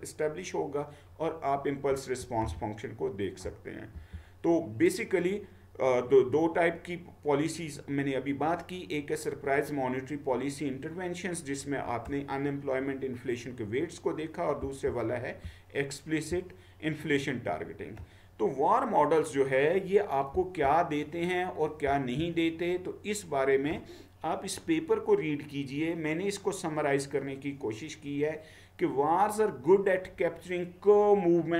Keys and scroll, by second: 1.9 Right, 2.5-3.4 Down, 4.1 Down, 14.6 Down, 15.4-16.3 Down, 20.4 Down, 21.9 Down.